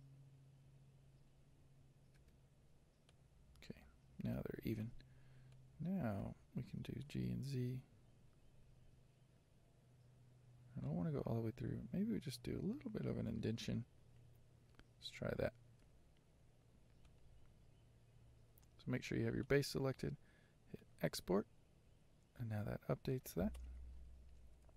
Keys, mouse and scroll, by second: 1.3 Tab, 3.2 z, 3.7-4.4 scroll down 7, 4.4 middle click, 5.0 scroll down 1, 5.6-6.9 middle drag, 6.9 g, 15.8 n, 17.2 click, 19.6 click, 24.0 click.